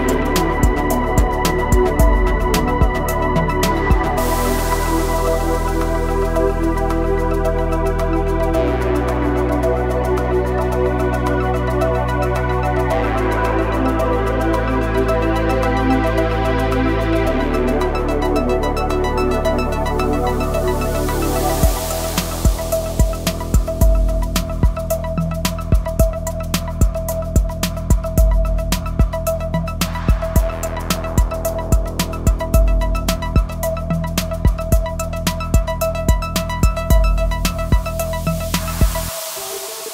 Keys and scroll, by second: 0.3 s, 5.8 s, 10.1 s, 15.1 s, 19.8 s, 26.5 s, 31.7 s, 36.7 s.